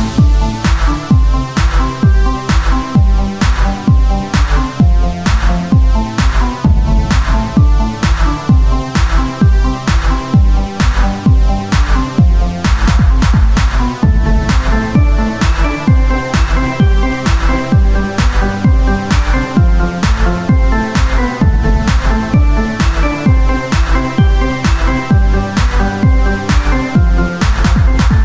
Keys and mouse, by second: 0.7 ctrl+Tab, 1.3 z, 1.6 c, 2.7 s, 3.9 c, 4.5 z, 5.4-6.8 drag, 13.5 c, 14.8 z, 15.6 e, 18.4 ctrl+Tab, 18.9 z, 20.9 x, 23.4 z, 25.5 x, 26.5-27.9 drag, 28.1 z.